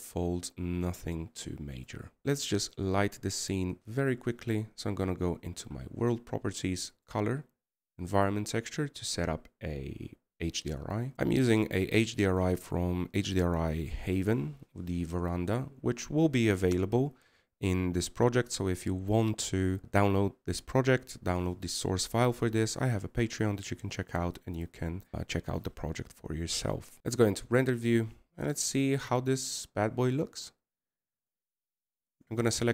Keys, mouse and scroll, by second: 0.4 middle click, 11.6-14.7 scroll up 3, 16.8 scroll down 2.